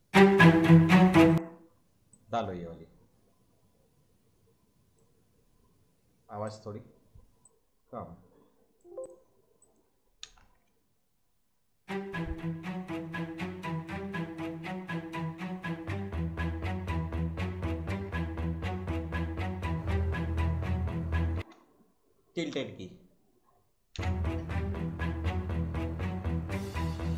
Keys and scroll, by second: 10.2 space, 21.3 space, 22.4 `, 23.9 space.